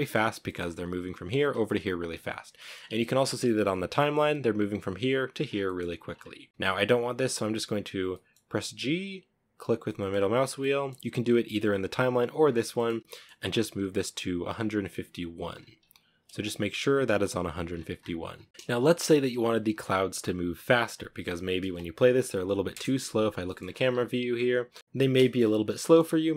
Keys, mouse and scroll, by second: 0.8-1.8 drag, 1.8 middle click, 2.0-2.5 scroll up 2, 3.3-4.7 drag, 4.7 scroll down 1, 4.9-5.3 middle drag, 5.3 scroll down 3, 6.4 g, 9.1 middle drag, 9.3 scroll up 2, 9.9-11.7 middle drag, 11.7 scroll up 5, 12.0 middle click, 12.2 g, 14.7-15.6 scroll up 5, 15.6-17.5 drag, 17.5 scroll down 9, 17.8-20.5 shift+middle drag, 20.5 drag, 20.8 space, 22.0 KP_0, 22.8 shift+middle click, 22.8-23.2 scroll up 6, 23.2 a, 24.8 scroll up 3, 25.1-26.3 shift+middle drag.